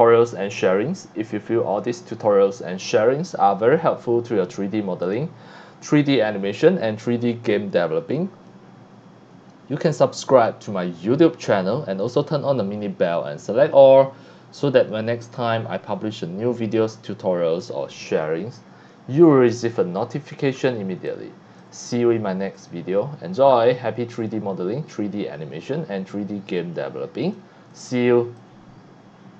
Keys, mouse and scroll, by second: 5.1 click, 7.8 click, 17.8-18.4 drag, 21.1-21.6 drag, 23.3-24.1 drag, 24.5-27.3 drag, 27.7 click.